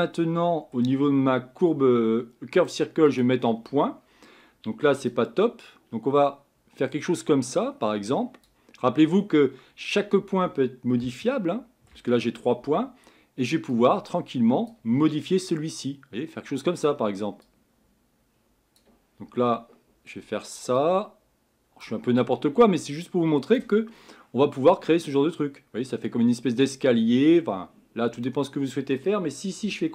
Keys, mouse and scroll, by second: 3.1 click, 5.5-8.1 drag, 9.2 scroll down 3, 11.1-14.1 shift+middle drag, 14.1-24.0 drag, 24.0-27.0 middle drag.